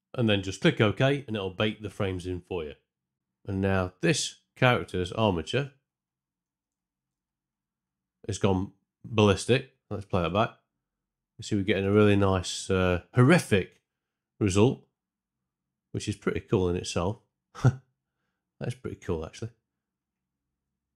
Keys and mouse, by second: 5.7 Tab, 5.7 a, 9.6 shift+Left, 10.2 space, 11.8 space, 12.0 shift+Left, 12.5 space, 13.1 space, 20.8 Left, 20.9 Left.